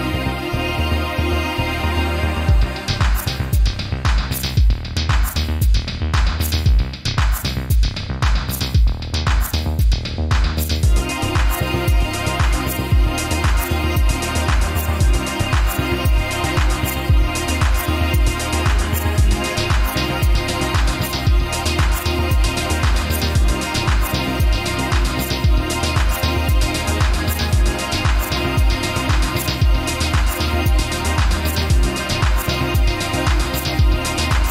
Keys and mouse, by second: 3.5-4.1 middle drag, 4.7 ctrl+r, 11.9 ctrl+r, 17.4-18.3 middle drag, 18.8 Tab, 19.5-20.2 middle drag, 20.6 middle click, 21.5 alt+h, 22.1-23.0 middle drag, 28.5-29.3 middle drag, 30.1-30.5 middle drag, 31.0 click, 31.5-32.0 shift+middle drag, 32.6 click.